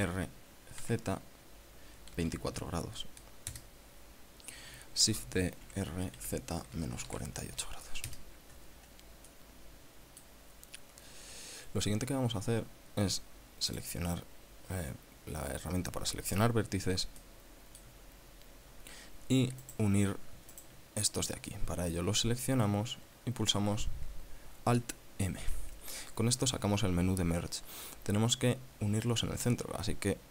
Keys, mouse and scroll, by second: 0.4 r, 1.3 z, 2.6 KP_2, 4.0 KP_Enter, 5.6-7.6 typing, 7.2 KP_Subtract, 8.6 KP_Enter, 9.7-10.9 drag, 11.1-11.5 scroll up 1, 11.7 scroll up 1, 14.2 click, 17.7 shift+middle click, 18.0 shift+scroll up 1, 18.7-19.5 scroll up 2, 20.1 right click, 21.0 shift+right click, 25.9 alt+m.